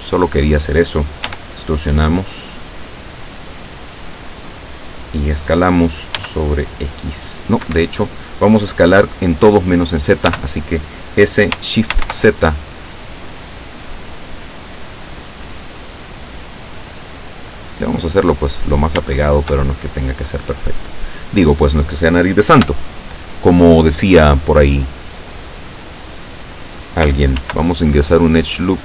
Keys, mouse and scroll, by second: 1.3 e, 4.3 click, 6.3 s, 7.7 Escape, 10.3 s, 12.0 shift+z, 17.8 click, 19.2-21.6 shift+middle drag, 22.7 KP_7, 25.6 middle click, 27.5 ctrl+r.